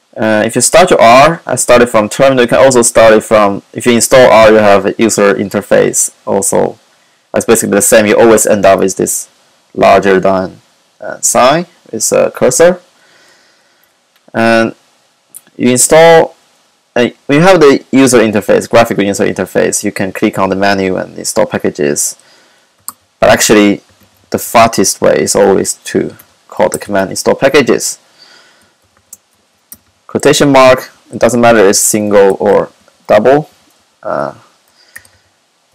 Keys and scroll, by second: 22.6-27.3 typing, 28.8-30.4 typing, 31.5-35.7 typing.